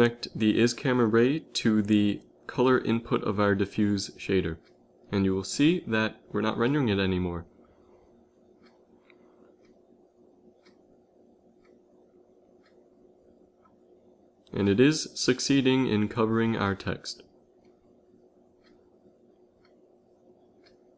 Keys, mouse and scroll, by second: 1.2-3.2 drag, 3.6 click, 4.4 shift+z, 6.3 z, 6.5 z, 7.5 g, 10.0 shift+z, 10.6 g, 20.5 z, 20.7 z.